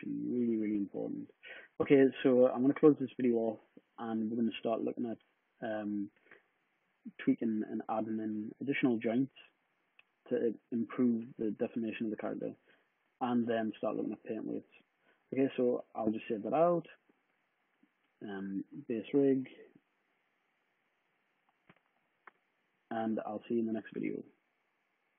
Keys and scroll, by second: 16.1 shift+super+s, 18.8-22.2 typing.